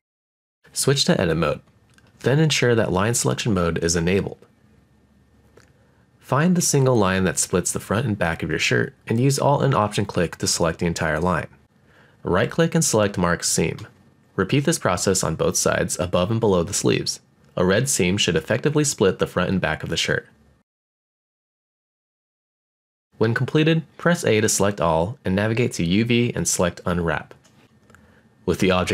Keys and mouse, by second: 0.7 click, 1.6 middle click, 3.1 click, 4.9 shift+middle click, 6.5 alt+click, 7.4-9.3 right drag, 9.7 click, 10.0 middle click, 11.4 alt+click, 11.7-13.0 middle drag, 12.4 right click, 13.3 middle click, 14.4-15.5 middle drag, 15.8 middle click, 16.4-17.5 middle drag, 17.9 alt+click, 19.1 middle click, 20.4 right click, 21.0-22.0 middle drag, 22.6 alt+click, 23.2 right click, 23.7-25.6 middle drag, 26.1 a, 27.0-27.7 drag, 27.7 middle click, 27.7 a.